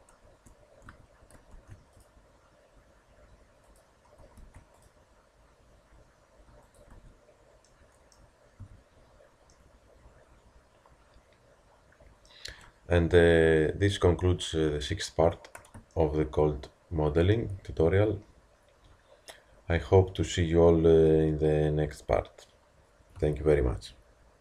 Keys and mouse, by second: 0.3 Tab, 0.3 Tab, 0.9 Tab, 1.6 ctrl+r, 4.4 ctrl+r, 6.9 Tab, 8.6 a, 14.5 KP_1.